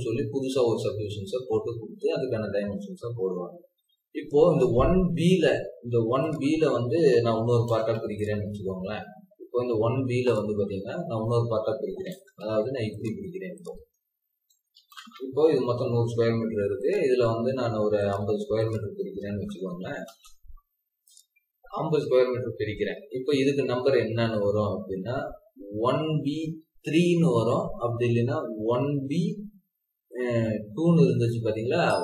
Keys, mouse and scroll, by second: 0.2 Escape, 0.6 scroll down 1, 2.9-3.4 scroll up 1, 3.4 scroll down 1, 7.0-7.5 typing, 8.5 scroll down 1, 9.7 scroll up 1, 10.5 Escape, 11.3 scroll up 1, 11.6-12.5 typing, 13.8 Escape, 14.4 typing, 19.0-19.7 typing, 20.0 Return.